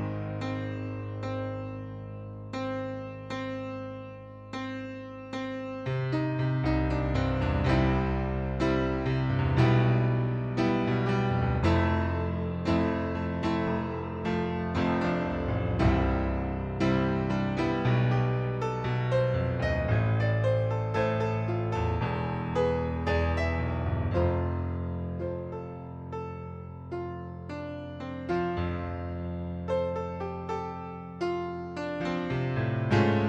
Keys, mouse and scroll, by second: 0.2 right click, 0.9 shift+click, 1.8 click, 3.2 click, 4.6 click, 5.7 click, 9.4 middle click, 10.1 right click, 11.5 shift+click, 12.4 click, 13.7 click, 15.1 click, 15.8 right click, 18.2 click, 19.1 click, 21.6 click, 22.2 middle click, 23.0 ctrl+d, 23.6 click, 25.6 ctrl+d, 26.1 right click, 27.0 click, 28.2 click, 29.6 ctrl+d, 30.1 click, 31.0 right click, 31.5 middle click, 32.8 shift+click.